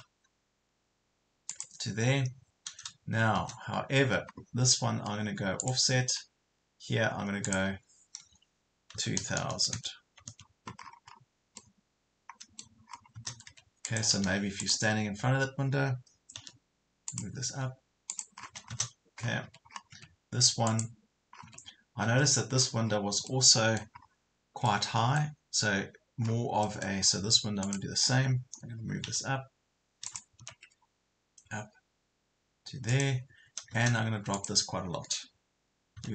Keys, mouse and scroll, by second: 1.5 click, 4.0 space, 5.6 click, 9.0 KP_2, 9.2 KP_0, 10.8 scroll down 1, 11.6 middle click, 12.8 scroll up 1, 13.5 Escape, 13.8 click, 16.4 m, 17.1 click, 18.4 scroll down 1, 19.4 Escape, 19.7 scroll up 1, 19.9 Escape, 20.7 click, 21.4 scroll down 1, 22.2 scroll down 1, 22.6 scroll up 1, 22.8 scroll down 1, 23.3 middle click, 24.7-26.0 middle drag, 26.3-26.6 scroll down 1, 26.6 middle click, 27.0 scroll up 1, 27.6 click, 29.0 m, 30.1 click, 32.9 click, 36.0 m.